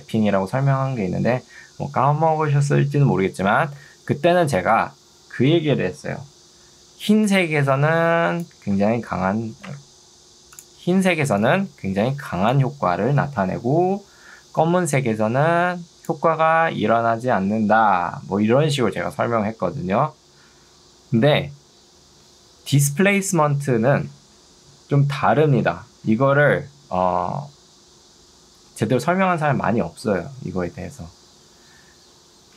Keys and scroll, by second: 3.9 Escape, 6.9 ctrl+2, 9.7 Escape, 11.1 ctrl+2.